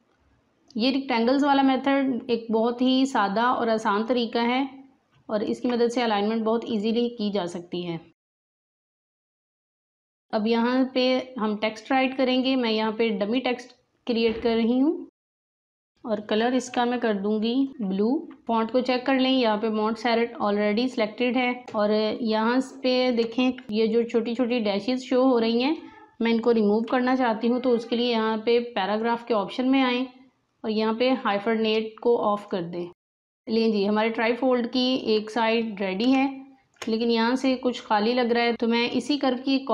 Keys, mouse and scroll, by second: 0.9-2.8 drag, 6.6 click, 9.0 scroll down 1, 9.3 click, 9.5 Delete, 9.9 alt+scroll down 1, 10.0 space, 10.1 click, 12.2-15.8 drag, 23.6 click, 26.8 v, 28.7 click, 32.3 click, 36.1 space, 36.1 click, 36.6 space, 38.5 Delete.